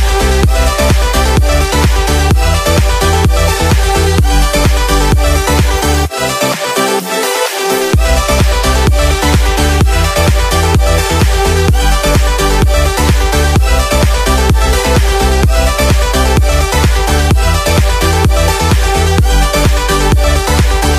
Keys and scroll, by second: 0.5 ctrl+=, 3.8 space, 6.6 space, 8.4 ctrl+z, 12.4 space, 15.7 space, 19.1 space.